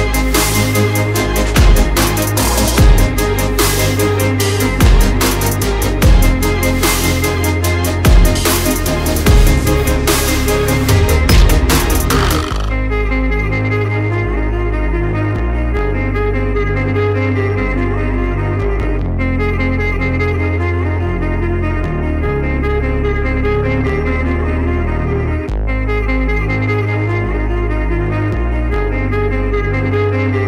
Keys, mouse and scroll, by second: 0.4 alt+scroll up 1, 2.6 click, 7.5 click, 13.2 shift+click, 16.3 alt+click, 17.2 alt+scroll down 2, 17.7 click, 18.0 alt+scroll up 1, 18.4 click, 19.0 alt+click, 20.2 click, 20.9 alt+click, 21.9 click, 22.5 alt+click, 23.6 click, 24.2 alt+click, 25.3 alt+scroll up 1, 25.8 shift+click, 26.8 shift+Right, 27.2 shift+Down, 28.0 alt+scroll down 1, 28.5 alt+scroll up 1, 29.4 click, 30.2 alt+click.